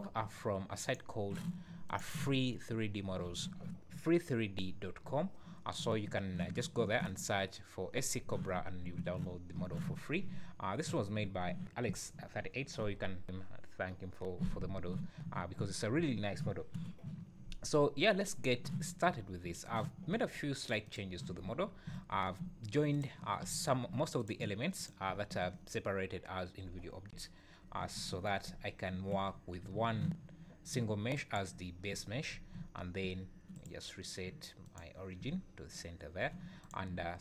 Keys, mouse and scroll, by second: 20.8 click, 21.3 `, 21.8 `, 22.3 `, 22.9 click, 23.3 `, 24.1 click, 24.7 click, 25.0 `, 27.1 `, 28.5 `, 29.3-29.7 scroll down 4, 29.7 g, 31.9 `, 32.3 scroll up 4, 32.6 `, 33.0 `, 33.6 right click, 35.2 `, 36.6 click, 37.0 `.